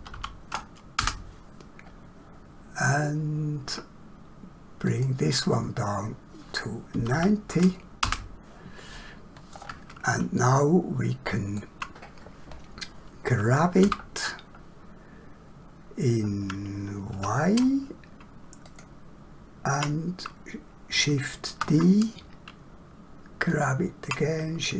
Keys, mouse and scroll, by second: 0.1 0, 1.0 Return, 4.9 click, 6.9 9, 7.1 0, 8.0 Return, 9.6 scroll down 1, 10.4 shift+middle click, 13.9 g, 17.2 y, 21.5 shift+d.